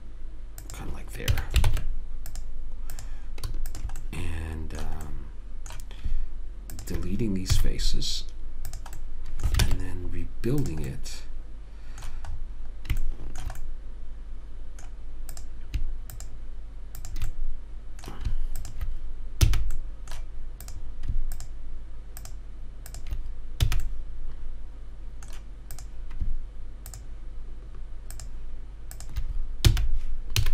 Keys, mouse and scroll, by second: 1.6 a, 2.0 ctrl+Tab, 3.3 click, 5.9-7.0 middle drag, 7.0 click, 7.8 x, 9.3 middle click, 10.0 ctrl+Tab, 11.0 middle click, 11.2-13.1 middle drag, 15.7-19.8 drag, 18.1 middle click, 18.1 right click, 18.2-19.8 right drag, 19.8 f, 20.1 right click, 20.2 click, 24.0 f, 26.1-30.5 drag, 30.0 f.